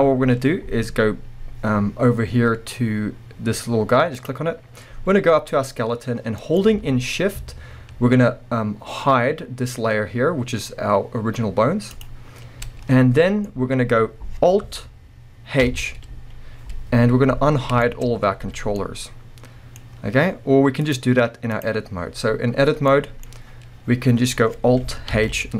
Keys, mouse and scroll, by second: 4.2 click, 4.3-12.0 middle drag, 6.8 alt+a, 12.0 shift+click, 13.1-20.8 middle drag, 13.4 scroll down 1, 15.6 alt+h, 17.5-17.8 scroll down 1, 18.1 scroll up 1, 20.8-22.9 drag, 22.9-25.5 middle drag, 23.3-25.1 scroll up 2, 25.1 alt+h.